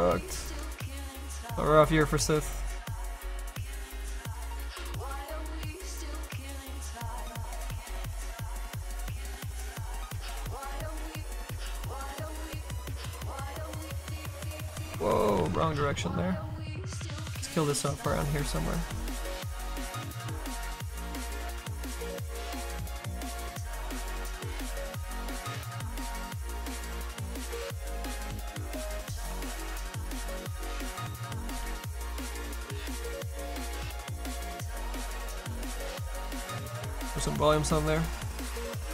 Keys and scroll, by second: 8.9 s, 14.6 ctrl+z, 15.0 ctrl+z, 15.1 ctrl+z, 16.8 s.